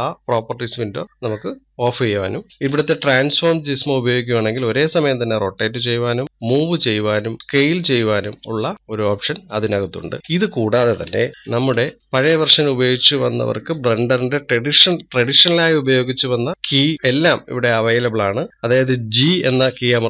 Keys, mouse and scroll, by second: 1.0 n, 2.5-3.5 middle drag, 3.5-5.2 drag, 11.3 ctrl+z, 11.6 ctrl+z, 19.9 g.